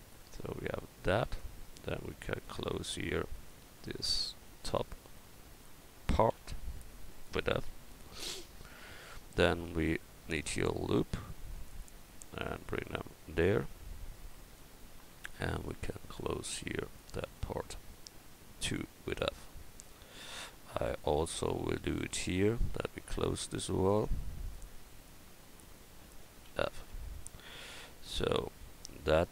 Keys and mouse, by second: 2.1-6.3 right drag, 6.3 f, 10.1-11.1 middle drag, 11.1 ctrl+r, 15.5-19.5 drag, 18.6 f, 19.5 middle click, 20.8-23.9 right drag, 21.8 e, 23.9 click, 24.4 right click, 26.5 f, 26.9 Tab, 29.2 a.